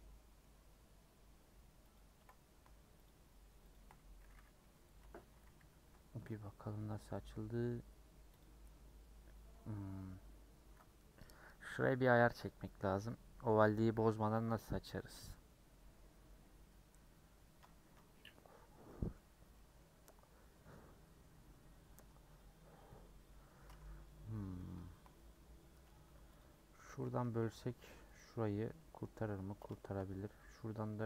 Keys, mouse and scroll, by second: 1.9 ctrl+click, 3.0 shift+click, 3.7 shift+click, 4.6 ;, 5.3 a, 6.3 u, 7.1-8.4 middle drag, 8.4 click, 8.6-10.1 middle drag, 10.1-11.7 scroll up 1, 11.7-13.9 middle drag, 13.9 scroll up 1, 14.7-16.4 middle drag, 16.4-17.0 scroll down 1, 17.8 a, 22.6-23.3 scroll up 1, 23.3 middle click, 23.7 scroll down 1, 24.0-25.9 middle drag, 25.9 2, 27.1 a, 28.2 u, 29.3-31.0 middle drag.